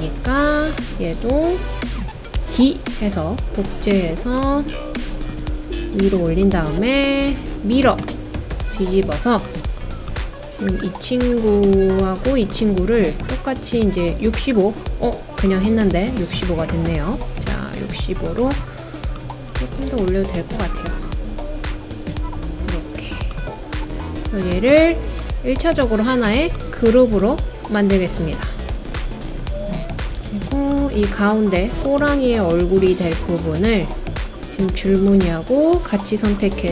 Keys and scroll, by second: 2.4 super+d, 30.2 super+z.